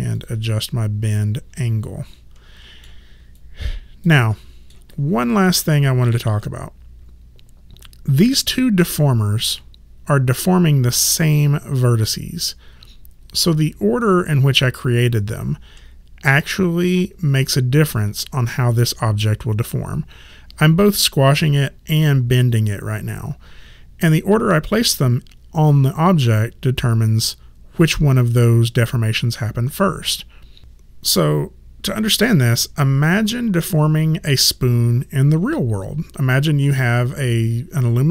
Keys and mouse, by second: 0.2 click, 0.7 middle click, 3.3 alt+click, 4.3 alt+middle click, 4.9 alt+right click, 5.7 alt+middle click.